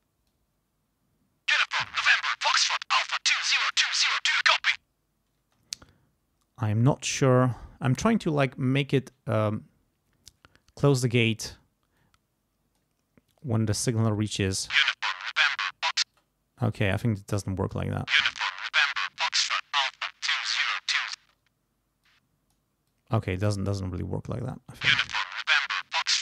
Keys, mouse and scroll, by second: 0.3-2.0 drag, 2.2-3.9 drag, 5.4 space, 12.0 click, 13.4 click, 14.4 space, 16.1 space, 16.1 click, 16.9 click, 17.8 space, 18.9-21.2 drag, 21.2 space, 22.0 click, 22.9-24.6 drag, 24.6 space, 25.8-26.2 drag.